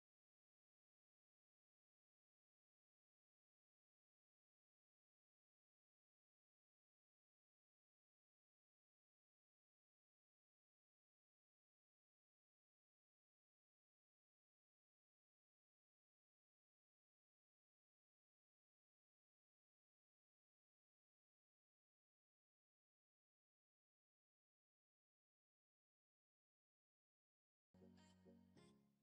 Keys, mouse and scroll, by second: 0.1 click, 0.8 click, 1.6 click, 2.4 shift+click, 3.5 shift+click, 4.4 shift+click, 5.6 click, 6.3 click, 6.9 click, 8.1 click, 10.2 click, 11.8 click, 13.1 Tab, 14.4 click, 15.0 click, 15.8 scroll up 1, 16.6 click, 21.9 click.